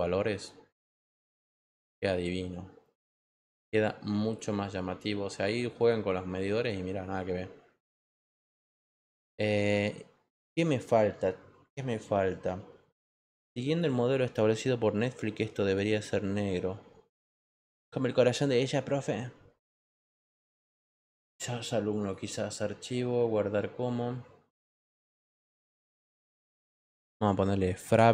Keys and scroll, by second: 27.5-28.1 typing.